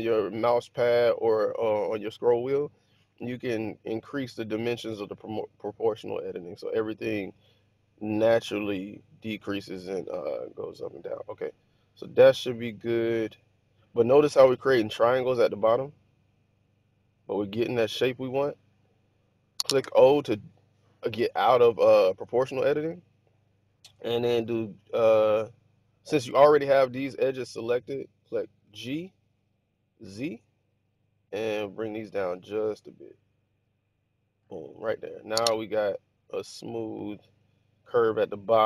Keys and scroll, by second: 19.7 o, 28.4-29.9 typing.